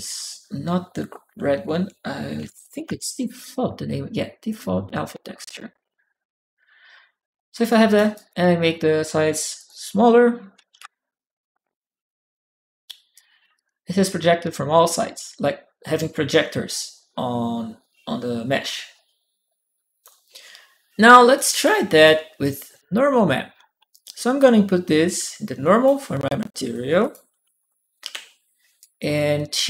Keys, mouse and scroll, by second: 1.9-3.3 typing, 4.3 click, 7.5 right click, 7.9 right click, 8.4 click, 9.4 click, 12.9 click, 13.3-19.8 drag, 21.1 right click, 21.8 right click, 21.9 click, 24.2-25.6 drag, 26.8 click, 27.8 shift+p, 28.6 click.